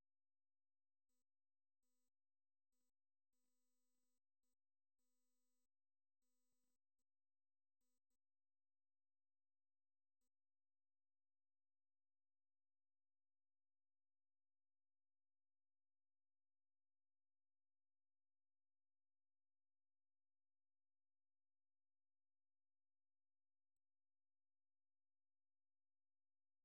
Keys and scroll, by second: 0.0-1.1 typing, 2.6 typing, 3.8 typing, 4.8 typing, 6.8 typing, 9.2 typing, 10.4-13.3 typing, 18.5 typing, 19.9-21.7 typing, 26.5-26.6 typing.